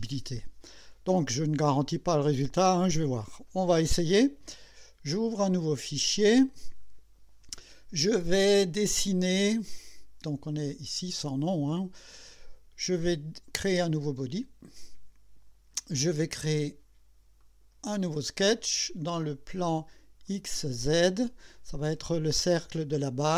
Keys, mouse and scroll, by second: 5.6 click, 10.5 click, 14.6 click, 17.4 click, 20.3 click.